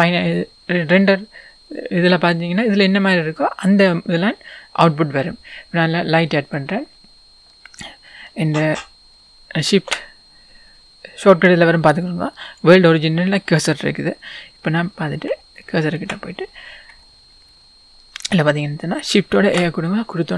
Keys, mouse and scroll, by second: 0.1-0.4 scroll up 1, 0.9-2.1 scroll down 2, 2.1-2.8 scroll down 1, 2.8-4.0 scroll up 2, 4.0-5.9 scroll down 2, 5.9-6.5 scroll down 1, 6.5-8.0 scroll down 1, 8.0-8.7 scroll down 1, 8.7-9.9 scroll down 1, 9.9-10.8 scroll down 1, 10.8-12.6 scroll down 1, 12.6 shift+s, 14.3-15.3 scroll up 2, 15.3-15.6 scroll up 1, 15.6-20.3 shift+middle drag, 16.2-16.9 scroll up 2, 16.9 scroll up 1.